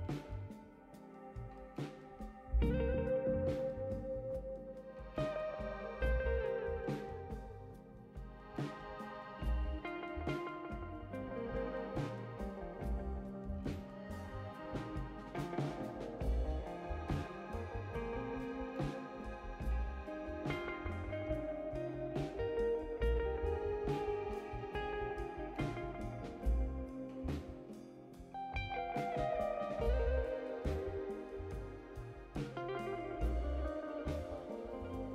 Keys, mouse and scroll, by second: 0.0-0.4 typing, 1.3 click, 2.5 click, 2.9-4.4 typing, 4.9 right click, 5.7 click, 10.5 click, 10.6 click, 12.0 click, 12.2 click, 12.8 5, 13.2 0, 13.5 Return, 14.4 click, 16.0 click, 18.2 click, 18.4 click, 19.6 right click, 21.1 click, 21.3 click, 22.4 7, 23.0 0, 24.1 click, 25.4 click, 27.5 click, 27.7 click, 29.6 click, 29.7 click, 32.7 click, 34.9 click.